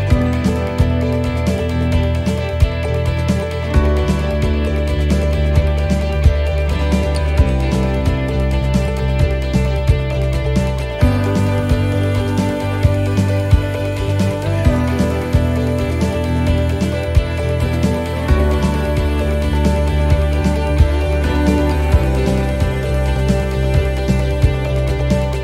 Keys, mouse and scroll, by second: 0.8 right click, 1.9 click, 3.9 shift+middle click, 4.5 scroll up 1, 6.6 click, 8.5 click, 10.5 shift+right click, 12.2 click, 16.9 click.